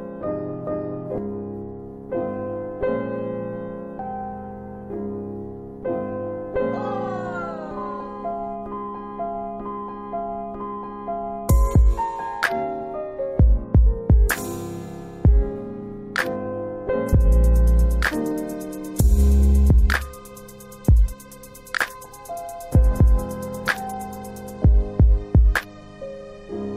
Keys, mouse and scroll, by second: 7.5 click, 10.0 right click, 11.8 alt+middle click, 14.9 click, 16.0 alt+w, 16.4 alt+w, 17.1 click, 17.8 scroll up 1, 19.5 scroll, 19.6 click, 20.7 alt+w, 21.2 alt+w, 21.6 alt+middle click, 22.4 middle click, 23.2 click, 23.9 alt+w, 24.7 alt+w, 25.1 middle click.